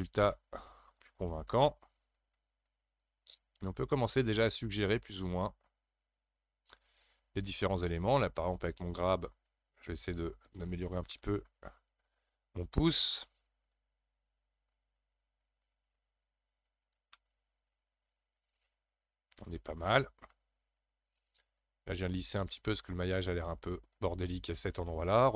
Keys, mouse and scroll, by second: 0.0 scroll up 1, 0.2 f, 1.2 f, 2.2-4.5 drag, 4.5-7.6 middle drag, 9.0-10.0 scroll down 3, 10.4 click, 10.8 scroll down 1, 11.1-12.6 middle drag, 12.6 scroll up 2, 13.7-17.2 drag, 17.2-20.2 middle drag, 21.2-22.6 shift+drag, 22.6-25.2 middle drag, 25.2-25.3 scroll up 8.